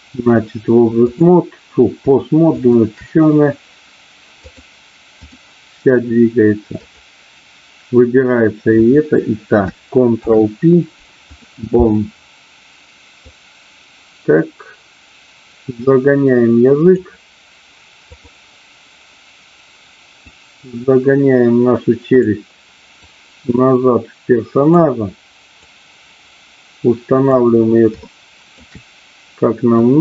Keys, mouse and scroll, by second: 0.9 click, 2.6 shift+click, 4.4 click, 6.8-7.8 drag, 10.1 ctrl+p, 13.2-17.1 drag, 18.1-19.2 drag, 20.3-22.3 drag, 23.2-24.7 drag, 25.7-27.4 drag, 27.9 shift+middle click, 29.8-30.0 drag.